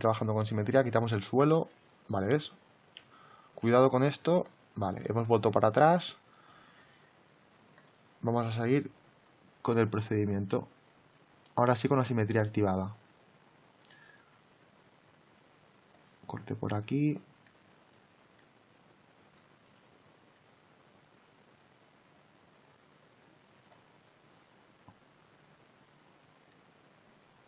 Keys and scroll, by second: 2.9 ctrl+z.